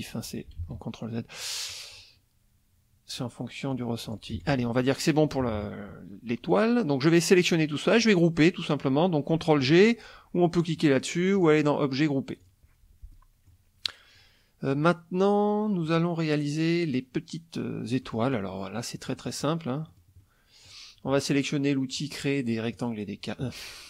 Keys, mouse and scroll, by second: 0.6 ctrl+z, 1.9 click, 3.1 click, 3.7 click, 4.1 click, 4.3 F1, 5.4 KP_Subtract, 6.5-7.8 drag, 11.4 click, 12.4 click, 13.1 middle click, 13.8 middle click, 18.0 middle click, 19.0 middle click, 19.9 middle click, 20.3 middle click, 22.8 click.